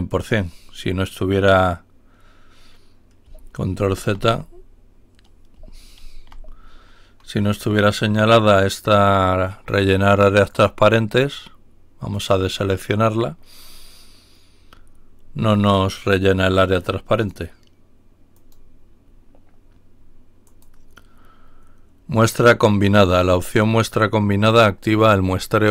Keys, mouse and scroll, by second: 3.8 ctrl+y, 5.9 ctrl+y, 10.6 click, 12.1 click, 15.5 click, 16.3 click, 17.1 click, 18.3 click, 20.4 click.